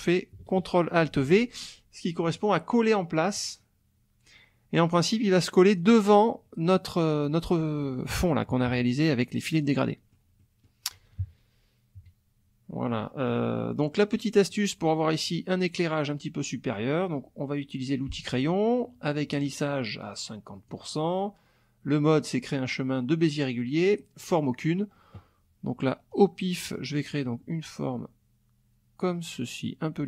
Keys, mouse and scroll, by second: 2.4 click, 3.3 click, 5.8 click, 8.5 KP_Subtract, 9.6 middle click, 9.9 click, 10.4 click, 11.2 KP_Subtract, 12.0 KP_Subtract, 12.9 click, 13.6 click, 14.5 click, 18.1 click, 19.4-20.9 drag, 26.1-30.0 drag.